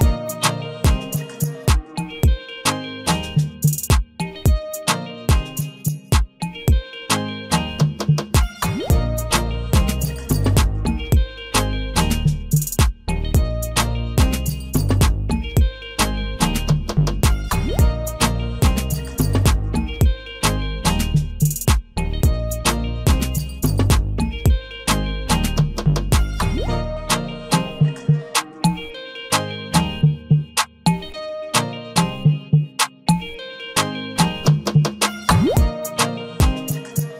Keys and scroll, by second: 20.0 ctrl+a, 24.8 ctrl+d.